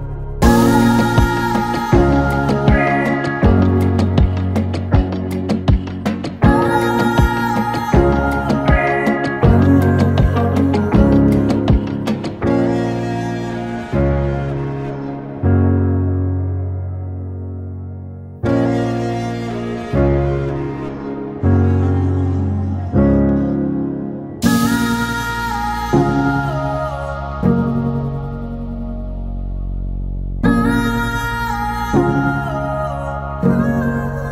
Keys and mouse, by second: 6.0 ctrl+z, 6.7 click, 9.3 shift+click, 10.1 v, 10.7 click, 13.1 click, 14.9 click, 16.3 click, 16.8 i, 17.5 click, 17.6 v, 18.0 ctrl+z, 18.4 click, 19.4 i, 19.7 v, 22.9 click, 26.1 i, 26.5 click, 28.3-30.9 drag, 32.5 Tab, 33.6 click.